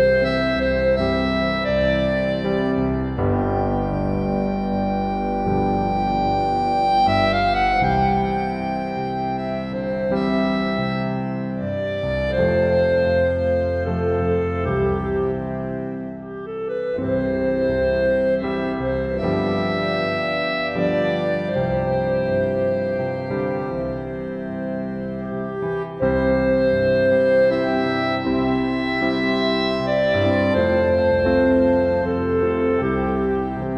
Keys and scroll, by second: 20.4 ctrl+u.